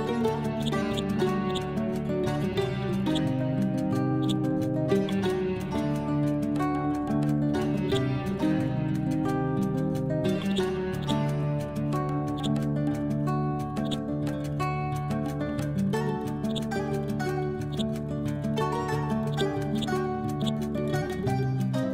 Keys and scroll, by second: 9.4 ctrl+a, 9.7 ctrl+u, 15.8 Left.